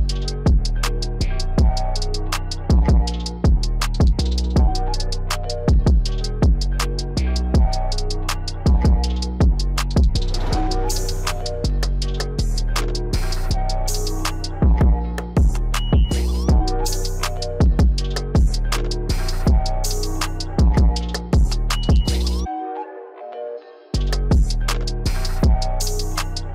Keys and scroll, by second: 2.3 ctrl+z.